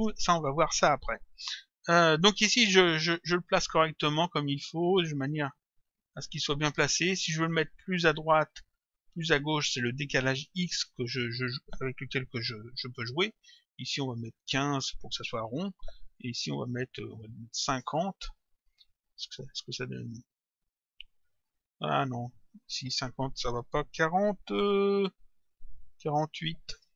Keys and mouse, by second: 4.5 click, 13.6 click, 15.5 Return, 16.9 click, 18.0 Return, 18.8 click, 20.0 click, 22.8 click, 26.8 Return.